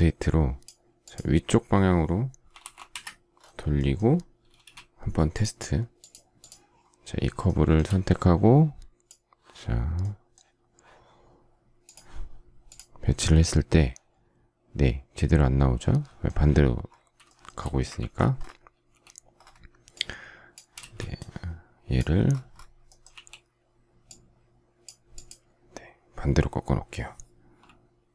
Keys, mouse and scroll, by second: 2.1-2.9 typing, 4.4 space, 7.3 shift+middle click, 17.2 shift+middle click, 17.4 shift+scroll, 17.9 ctrl+z, 20.7 space, 23.1 q.